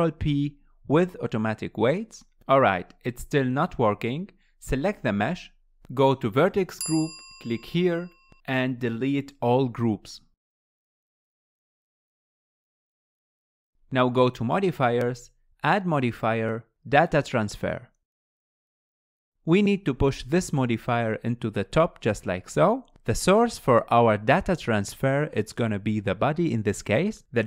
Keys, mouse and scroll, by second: 4.6 click, 10.4-13.5 drag, 14.9 click, 17.2-20.2 drag, 21.5-22.7 drag, 25.4 click.